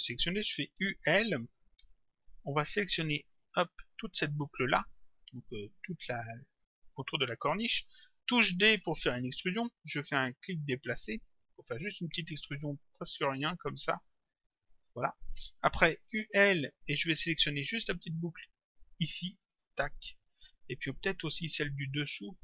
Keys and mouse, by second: 0.8 u, 1.1 l, 3.5 click, 5.5 click, 8.7 d, 10.4 click, 16.1 u, 19.5 click, 21.4 click.